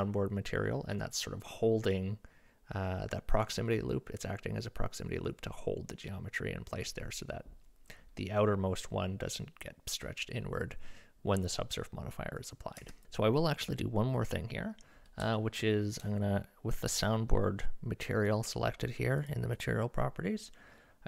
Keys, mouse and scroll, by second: 12.8 Tab, 15.4 shift+drag, 19.2 click, 19.5 click.